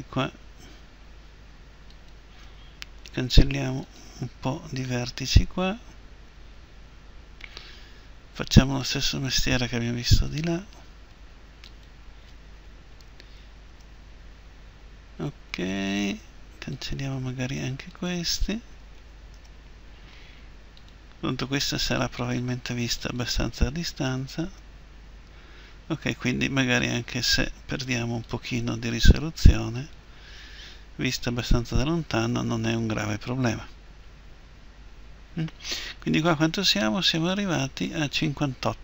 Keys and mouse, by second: 3.1 Delete, 10.1-16.1 right drag, 12.9 Delete, 19.0 Delete, 19.0-24.1 right drag, 24.1 Delete, 28.2-30.7 right drag, 30.7 Delete.